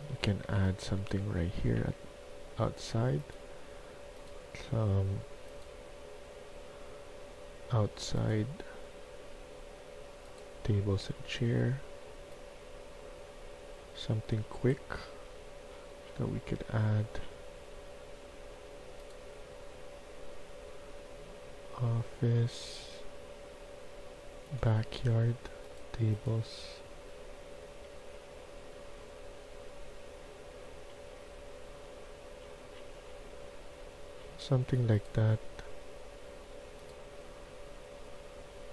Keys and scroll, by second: 0.0-1.6 typing.